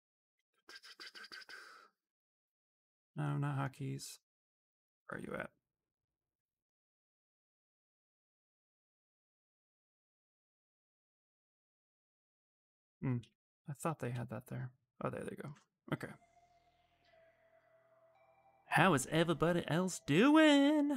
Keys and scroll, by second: 12.9 s, 13.6 s, 13.8 s.